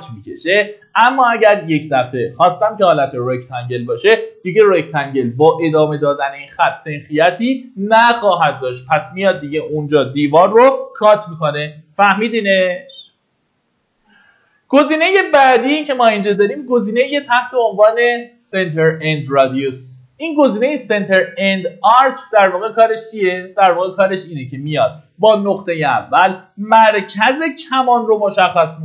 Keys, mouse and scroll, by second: 22.9-23.6 scroll down 1, 23.6 middle click, 24.2-24.7 scroll up 1, 26.2-27.4 drag.